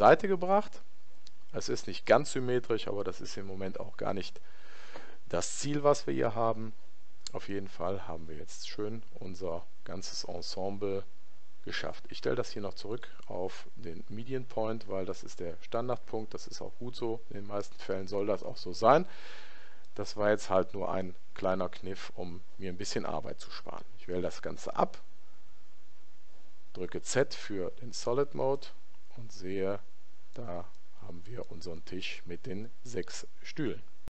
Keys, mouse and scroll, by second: 7.5-9.4 middle drag, 13.0 click, 19.9-21.9 middle drag, 24.2 a, 27.8 z, 28.6-30.5 middle drag, 30.8-32.8 middle drag.